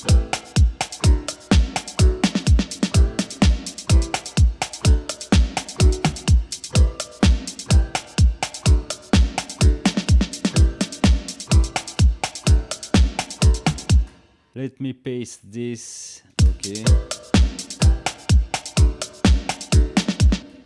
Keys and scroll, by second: 13.9 space, 15.8 ctrl+j, 16.3 space, 20.3 space.